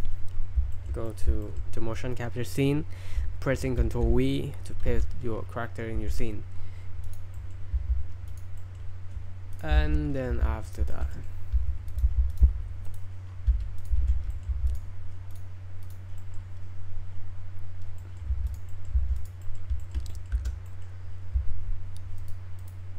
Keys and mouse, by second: 0.7 shift+middle click, 1.1 middle click, 1.4 shift+middle click, 3.9 ctrl+v, 4.9 n, 6.0 s, 7.0-7.3 drag, 7.3 middle click, 7.7 g, 8.6 middle drag, 9.5 click, 9.7 shift+s, 10.3 g, 10.9 shift+middle drag, 11.1 middle drag, 11.5 s, 12.0 g, 12.3-12.9 drag, 14.0 shift+s, 14.3 middle click, 14.5 g, 14.7-15.0 drag, 15.4-16.0 drag, 16.2 middle drag, 18.0 middle click, 18.5 drag, 18.5 g, 18.7 middle click, 18.9 g, 19.4 middle click, 19.8 shift+middle drag, 20.1 click, 20.7 click, 20.7 space, 22.6 click.